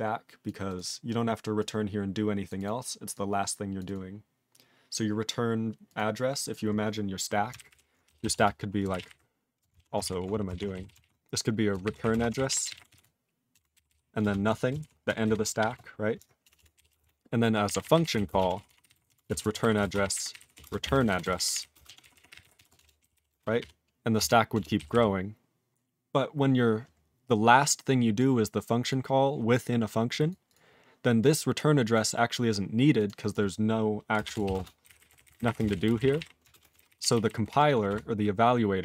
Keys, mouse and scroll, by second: 0.4 click, 0.6 click, 0.7 click, 1.6 click, 2.4 click, 2.5 click, 2.6 click, 3.1 click, 3.7 click, 3.8 click, 3.9 click, 5.8 click, 5.9 click, 6.4 click, 6.5 click, 7.5 ctrl+o, 7.7 ctrl+o, 8.0-9.5 typing, 9.7 ctrl+a, 10.0 ctrl+d, 10.5 ctrl+d, 10.7-15.6 typing, 11.0 ctrl+e, 13.5 Return, 16.4 Return, 16.5 Return, 16.7-24.9 typing, 24.1 Return, 24.5 Return, 27.3-28.1 scroll down 1, 28.1 click, 28.9 click, 30.1 click, 30.3 click, 30.4 click, 30.5 click, 31.2 click, 31.9 click, 32.9 click, 33.0 click, 33.2 click, 33.3 click, 34.0-36.6 typing, 36.7 ctrl+alt+b, 36.9 ctrl+alt+b, 37.0 ctrl+alt+b, 37.1 ctrl+alt+b, 37.2 ctrl+alt+b, 37.4 ctrl+alt+b, 37.5 ctrl+alt+f, 37.9 BackSpace.